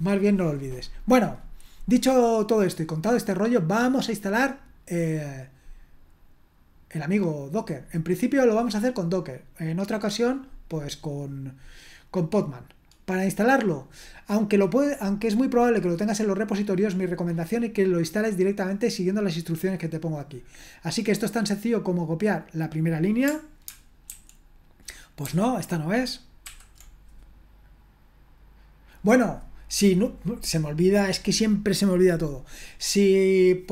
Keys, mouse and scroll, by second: 3.8 click, 11.8-13.1 drag, 22.7 click, 24.1 ctrl+alt+v, 25.2 ctrl+c, 26.5 ctrl+l.